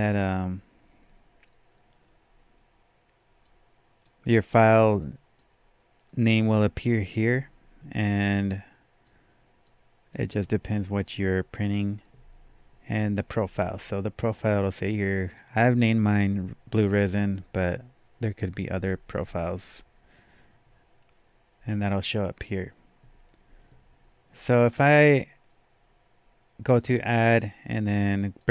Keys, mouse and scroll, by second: 3.5-8.9 drag, 9.1-12.8 drag, 26.7-28.4 drag, 28.4 click.